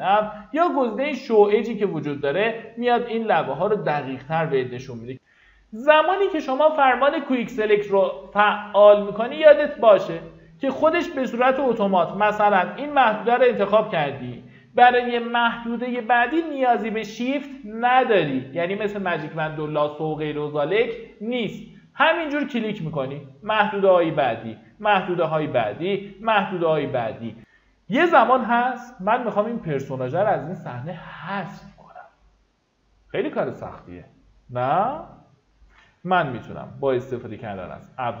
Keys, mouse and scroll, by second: 8.0 alt+scroll down 1, 9.6 ctrl+d, 11.7 click, 21.8-25.1 drag, 36.7 typing.